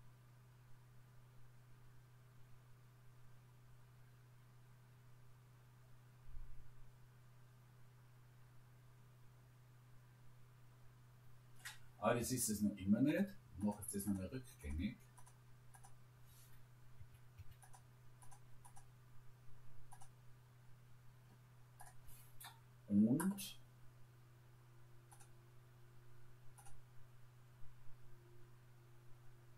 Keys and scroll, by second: 17.0 Escape.